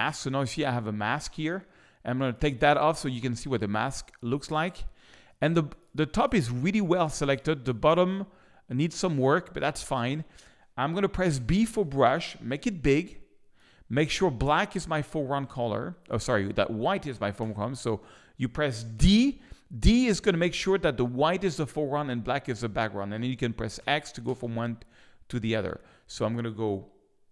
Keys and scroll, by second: 3.6 space, 5.3 space, 11.3 b, 17.4 x, 19.0 d, 23.8 x.